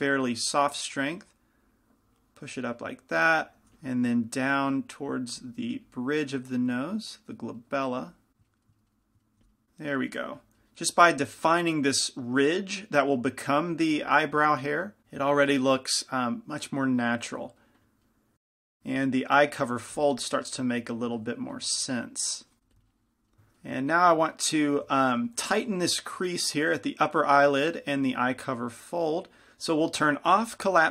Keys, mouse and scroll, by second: 0.4-3.5 drag, 2.9 middle click, 3.5 ctrl+z, 3.9 f, 4.8-9.1 drag, 7.4-9.1 middle drag, 9.5 f, 9.6-11.1 drag, 15.0 click, 18.8 f, 21.9-23.5 drag, 22.7 shift+f, 24.5-30.9 middle drag.